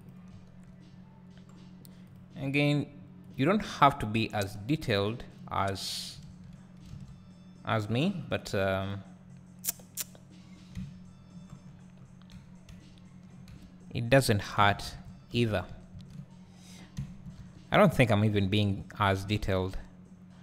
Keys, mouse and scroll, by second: 0.1 click, 0.3 `, 0.8 scroll up 2, 2.5 click, 3.3 shift+click, 4.6-6.1 drag, 6.3 ctrl+z, 6.9 alt+a, 7.2-9.0 scroll up 2, 9.0-10.4 scroll down 2, 10.4-11.6 scroll down 1, 11.6-12.3 scroll down 1, 12.3 Tab, 12.7 `, 13.5 Tab, 14.6-15.2 scroll up 2, 15.2 ctrl+z, 16.0-20.4 ctrl+drag, 16.1 ctrl+z, 16.9 `, 17.4 Tab, 17.7 `, 18.7-19.2 scroll up 2, 19.2 `.